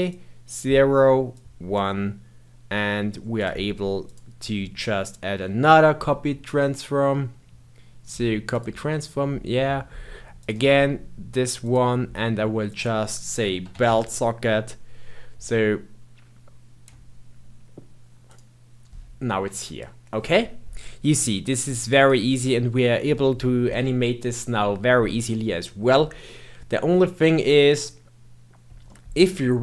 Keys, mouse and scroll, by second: 0.0-8.0 drag, 10.3 click, 12.6-15.7 drag, 21.4-22.5 drag, 22.5-23.8 scroll down 7, 23.8-25.1 middle drag, 25.1-26.2 scroll down 3, 26.2-27.4 middle drag, 27.4-28.5 scroll up 2, 28.5-28.8 scroll up 1, 28.8-29.6 middle drag.